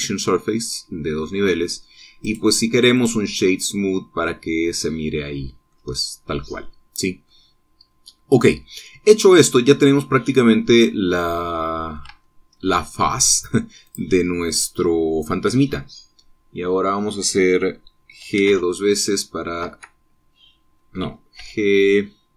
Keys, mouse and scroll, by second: 2.9 click, 3.6 click, 4.3-8.1 middle drag, 9.1-12.8 middle drag, 12.8 Tab, 13.3 scroll up 1, 14.5 click, 16.4-17.8 middle drag, 18.9 g, 20.3 Escape, 22.0 g.